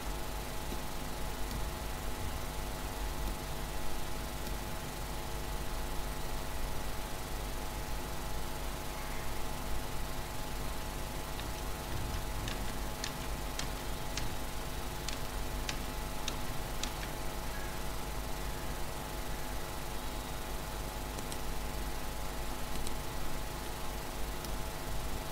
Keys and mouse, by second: 5.0 Tab, 6.1-7.1 middle drag, 14.2-16.9 ctrl+z, 19.6 ctrl+z, 19.6-21.6 middle drag, 21.2-23.7 right drag, 23.7 middle click, 24.7 Tab.